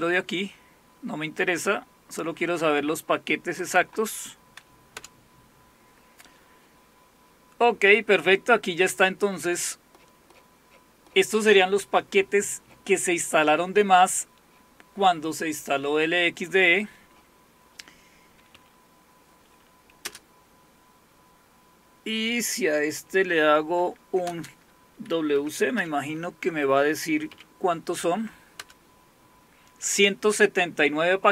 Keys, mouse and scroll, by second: 0.0-3.1 drag, 3.6-4.7 drag, 8.4-12.9 scroll up 2, 12.9-15.8 scroll up 1, 15.8-18.6 scroll up 1, 18.6-20.0 scroll up 1, 20.0 space, 21.1 typing, 23.8 |, 25.2-27.3 typing, 28.6 Return.